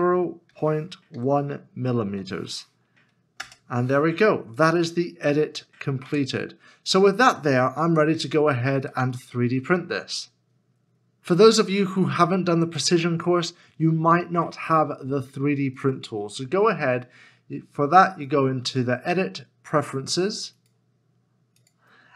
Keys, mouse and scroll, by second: 0.0-2.1 typing, 3.4 Return, 6.0 Return, 6.5-6.9 scroll down 1, 7.8 middle click, 8.4 shift+middle click, 9.2 shift+middle click.